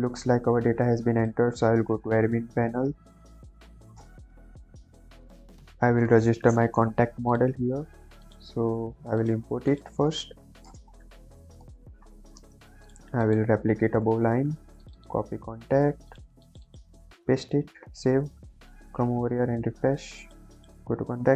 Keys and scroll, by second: 10.4 ,, 10.6 space, 10.9 shift+c, 11.0 o, 11.5 Return, 14.0 ctrl+d, 15.3 ctrl+c, 17.1 ctrl+v, 17.5 ctrl+s.